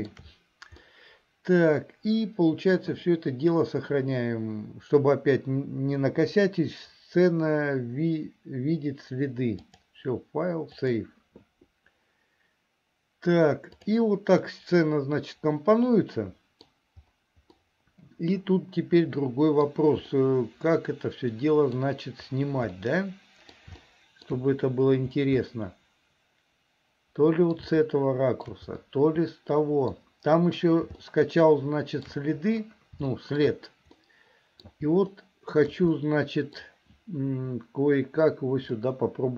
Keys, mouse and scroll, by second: 0.9-2.0 scroll up 1, 2.0 middle click, 9.7-13.0 drag, 13.8 click, 14.5-16.7 middle drag, 17.6-19.7 middle drag, 20.2-21.9 middle drag, 22.8 middle click, 23.9 shift+middle click, 25.5-27.7 middle drag, 27.8 shift+middle click, 28.9-30.0 middle drag, 31.1-32.2 shift+middle drag, 33.2 shift+middle click, 34.0 middle click, 35.2 shift+middle click, 36.0 middle click, 38.8 middle click.